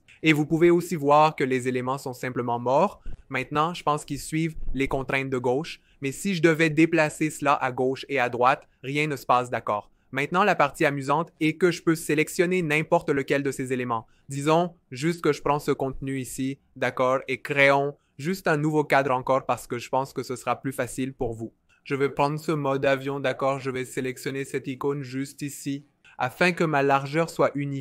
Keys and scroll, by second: 4.1 v, 4.7 super+z, 7.7 super+z, 17.7 f.